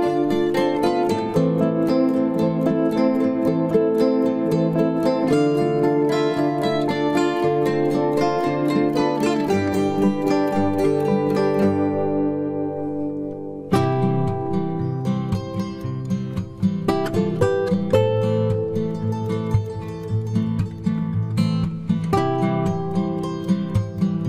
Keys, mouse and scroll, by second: 4.3 right click, 4.4-8.6 middle drag, 8.0 z, 9.2 i, 10.7 middle click, 12.0-13.4 drag, 13.2 KP_3, 13.8 Tab, 15.5 Tab, 15.9 z, 17.1 c, 18.8-20.5 right drag, 20.9 z, 22.3-24.0 drag, 24.0 KP_3.